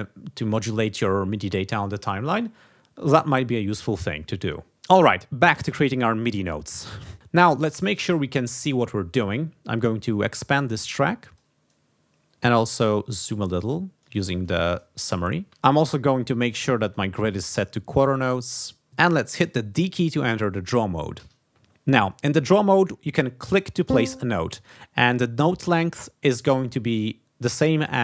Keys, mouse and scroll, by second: 9.1 click, 10.0-11.6 drag, 12.7-14.2 drag, 16.8 click, 18.4 click, 21.1 d, 23.7 click.